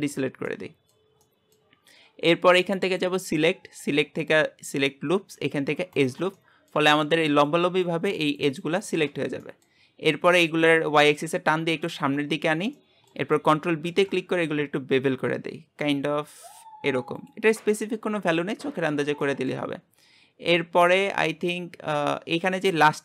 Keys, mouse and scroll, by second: 0.2-0.5 scroll down 4, 0.5-6.2 middle drag, 6.4-9.9 shift+middle drag, 9.9-10.9 scroll up 2, 10.9 click, 12.8-13.9 shift+middle drag, 13.9 ctrl+b, 17.5-19.8 middle drag, 19.8-20.9 scroll up 1, 20.9 middle click, 21.2 scroll down 2, 21.4-22.6 shift+middle drag, 22.6-23.0 scroll up 2.